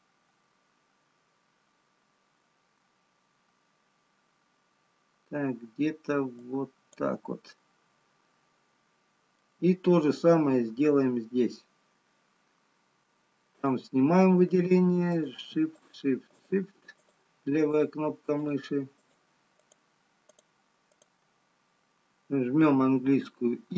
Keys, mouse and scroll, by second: 8.4 middle click, 16.1 shift+click, 18.7 shift+click, 19.5 shift+click, 22.9 shift+click, 22.9 i.